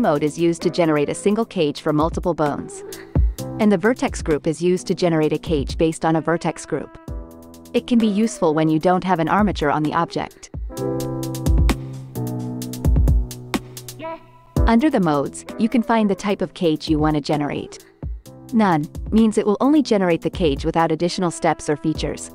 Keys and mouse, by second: 0.5-4.5 drag, 5.6-14.5 drag, 16.1 click, 18.8 click, 22.1 click.